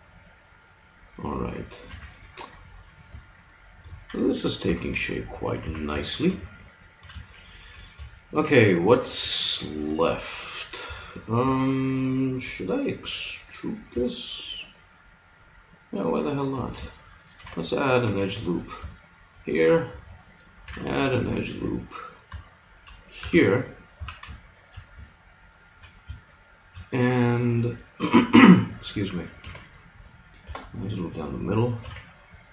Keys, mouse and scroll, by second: 1.9 a, 2.1 middle click, 4.7 KP_3, 5.6 z, 8.7-10.1 middle drag, 10.5-12.2 right drag, 10.8 Tab, 12.2 middle click, 13.3 right click, 13.6 click, 16.5 middle click, 17.3 ctrl+r, 20.7 ctrl+r, 23.2 a, 23.4 middle click, 23.9 z, 24.6-25.6 middle drag, 29.4 ctrl+r, 31.8 ctrl+r.